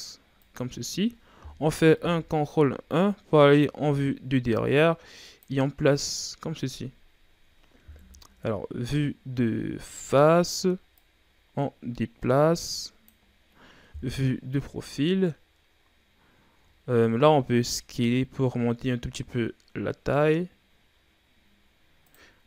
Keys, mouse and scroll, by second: 0.8-1.9 scroll down 3, 1.9 ctrl+KP_1, 3.0-3.4 ctrl+scroll down 5, 3.4-4.6 scroll up 5, 4.6-5.8 drag, 5.8-7.1 ctrl+scroll up 5, 7.1-8.0 ctrl+scroll up 2, 8.0 KP_1, 9.1-9.8 scroll down 3, 9.8-10.2 scroll down 2, 10.2-11.0 scroll up 2, 11.0-13.3 drag, 13.3-13.9 scroll down 4, 13.9 KP_3, 15.3-16.7 scroll up 5, 16.7-17.1 shift+scroll down 1, 17.5 s.